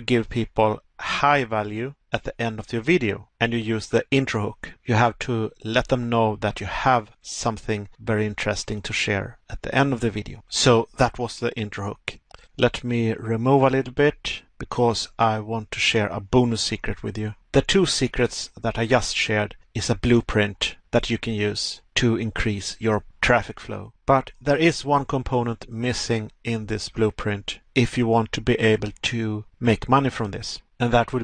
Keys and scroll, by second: 1.5 Pause, 14.2 Pause, 30.6 Pause.